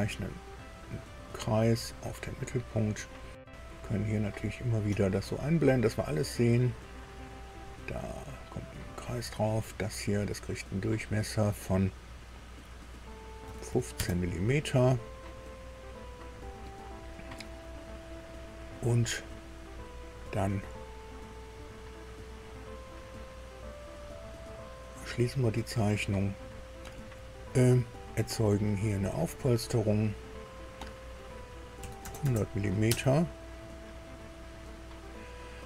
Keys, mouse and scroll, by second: 0.6 click, 4.5 click, 7.3 click, 8.1 click, 8.6 right click, 9.3 click, 10.8 click, 13.4 KP_1, 13.7 KP_5, 14.0 KP_Enter, 15.9-17.2 drag, 18.0-18.4 scroll down 2, 18.6 scroll up 2, 21.6-21.9 scroll down 2, 22.4 scroll up 2, 25.1 click, 28.9 click, 31.8 KP_1, 32.0 KP_0, 32.2 KP_0, 32.8 Tab, 33.9-35.0 drag.